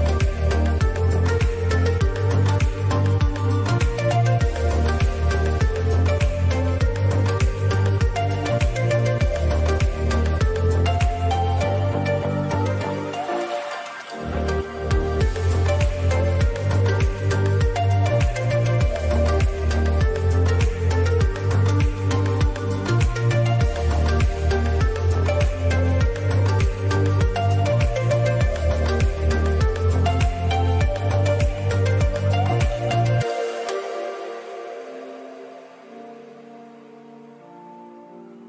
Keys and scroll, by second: 0.8 ctrl+2, 2.9 ctrl+2, 3.9 ctrl+KP_Add, 4.5 space, 5.4 ctrl+KP_Add, 5.4 space, 6.2 KP_Add, 7.9 ctrl+KP_Add, 8.2 space, 18.7 ctrl+z, 20.2 ctrl+KP_Add, 28.9 space, 30.1 ctrl+z, 36.3 ctrl+z.